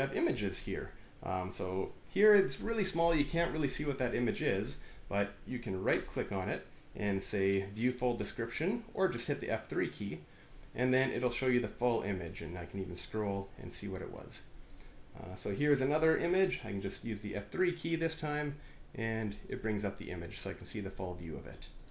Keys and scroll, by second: 17.1 F3.